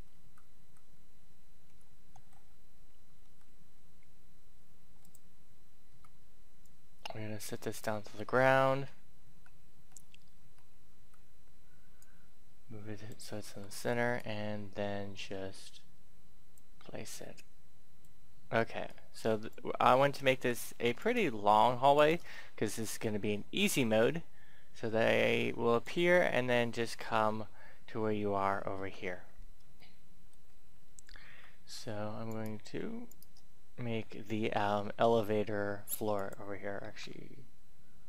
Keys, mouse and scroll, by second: 0.1 a, 1.5 g, 2.0 x, 3.2 y, 4.9 click, 5.9 click, 8.2 middle click, 8.9-9.2 scroll up 1, 11.9 click, 13.5 Tab, 14.1-18.6 drag, 20.3 Tab, 20.9 right click, 21.9 shift+right click, 22.1 scroll down 1, 23.6-26.6 drag, 28.8 Tab, 29.3-29.7 scroll up 1, 29.8 shift+middle click, 30.7 scroll up 1, 31.3-32.2 scroll up 1, 32.2 right click, 33.0 shift+right click, 36.1 click.